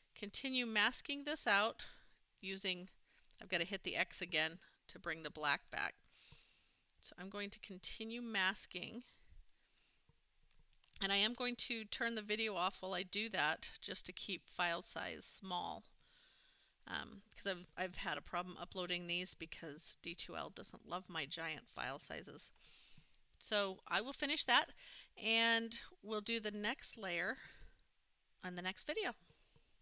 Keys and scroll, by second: 27.1 super+-.